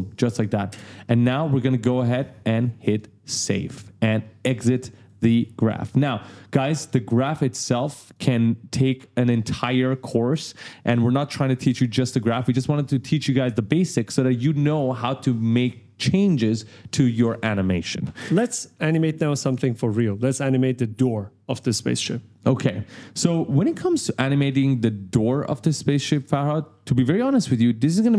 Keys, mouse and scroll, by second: 0.7 space, 1.9 click, 2.8 click, 5.5 click, 6.7 click, 8.0 click, 21.4 click, 22.3 click, 24.3-25.5 typing, 24.5 right click.